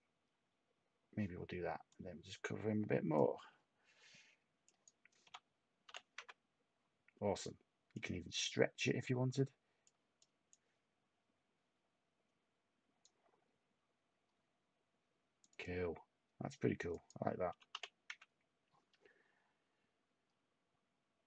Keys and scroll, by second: 5.2 8, 5.8 5, 10.5 Tab, 17.2-18.2 typing.